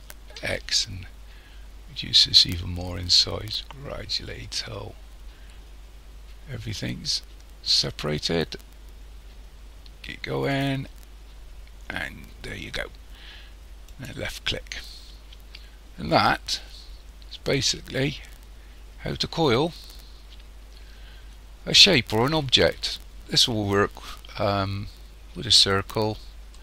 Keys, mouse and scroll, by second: 14.8 scroll down 1, 16.1 middle click, 26.5 middle click.